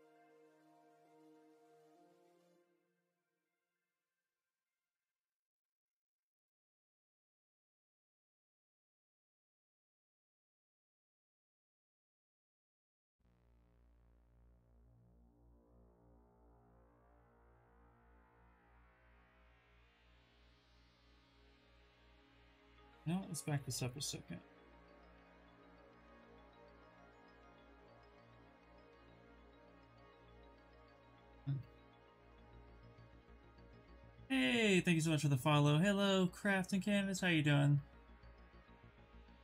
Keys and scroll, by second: 0.3 ctrl+space, 2.6 w, 4.5 q, 7.1 ctrl+space, 9.1 w, 9.9 q, 17.4 w, 18.6 q, 22.4 ctrl+z, 22.6 ctrl+z, 22.8 ctrl+z, 22.9 ctrl+z, 23.1 ctrl+z, 23.2 ctrl+z, 23.4 ctrl+z, 23.5 ctrl+z, 23.8 ctrl+z, 24.1 ctrl+z, 24.3 ctrl+z, 24.5 ctrl+z, 24.9 ctrl+z, 25.2 ctrl+z, 25.5 ctrl+z, 25.7 ctrl+z, 25.9 ctrl+z, 26.1 ctrl+z, 26.3 ctrl+z, 26.6 ctrl+z, 26.8 ctrl+z, 26.9 ctrl+z, 27.1 ctrl+z, 27.5 ctrl+z, 27.7 ctrl+z.